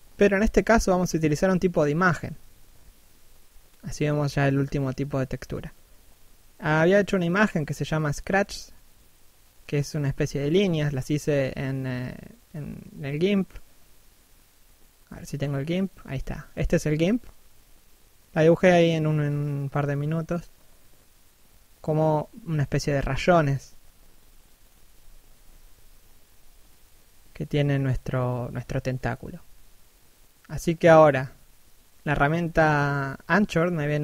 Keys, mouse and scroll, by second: 23.5 right click, 23.8 scroll up 1, 24.0 f, 25.9 right click, 28.6 right click, 28.9 click, 31.4 middle click.